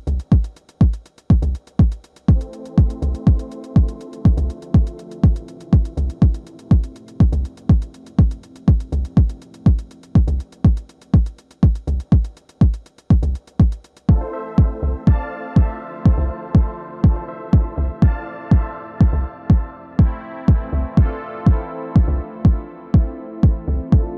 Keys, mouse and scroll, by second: 1.3-2.3 middle drag, 2.0 f, 2.3-8.6 drag, 5.1 f, 8.6 middle click, 9.1-16.1 drag, 9.7 f, 13.7 f, 15.0 f, 16.1 middle click, 16.3 f, 16.4-18.7 drag, 18.7 middle click, 18.9 click, 19.3-20.9 middle drag, 19.6-22.9 drag, 21.2-23.3 middle drag, 23.3 click, 23.8 middle click.